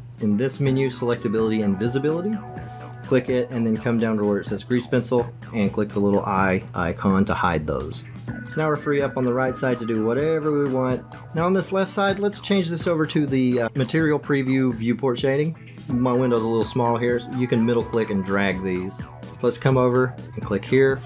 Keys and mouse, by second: 2.4-8.1 drag, 8.4 middle click, 8.9 middle click, 9.1 middle click, 9.3-11.1 middle drag, 18.0-19.3 drag.